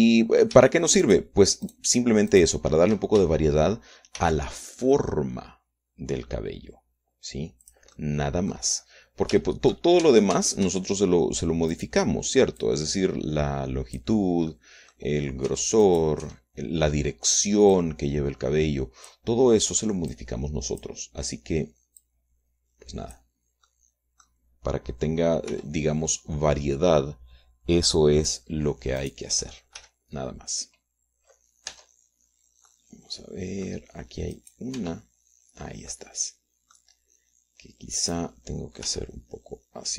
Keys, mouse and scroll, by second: 0.7 shift+middle click, 2.4 shift+middle click, 2.7 shift+right click, 3.0 shift+middle click, 3.3 shift+right click, 5.5 shift+d, 9.0 click, 9.3 middle click, 9.3 click, 9.3 right click, 10.1 middle click, 10.7 shift+middle click, 11.4 shift+Tab, 13.1 right click, 13.9-15.5 drag, 15.9 middle click, 16.5 scroll up 1, 16.8 Tab, 17.2 click, 17.6 Tab, 19.1-20.7 drag, 21.5 click, 23.4-24.7 drag, 25.0 click, 25.8-29.6 middle drag, 26.9 r, 29.7 click, 29.9 middle click, 30.4 click, 30.7-31.9 middle drag, 31.1 g, 31.9 click, 33.1 Tab, 33.6 scroll down 1, 34.1 middle click, 34.7 click, 35.7 click, 36.1 Tab, 37.3-38.3 drag, 39.3 click.